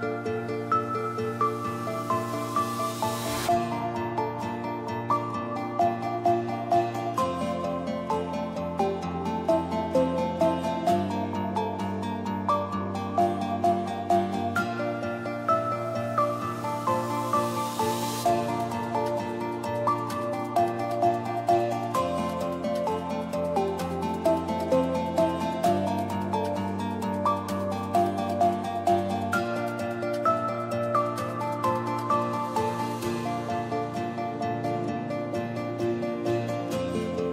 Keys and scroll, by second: 0.9 i, 8.7 i, 8.8 space, 18.1 space, 18.2 Down, 27.7 BackSpace, 33.6 BackSpace, 33.8 ctrl+d.